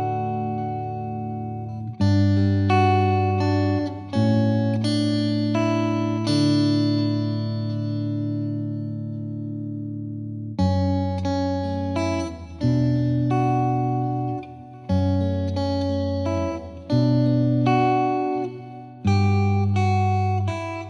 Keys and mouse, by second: 2.1 right click, 2.1 click, 2.7 click, 4.9 click, 5.4 click, 6.1 click, 7.6 click, 8.0 shift+click, 12.5 click, 13.2 click, 13.9 shift+click, 15.6 shift+click, 18.8 F3, 20.2 click.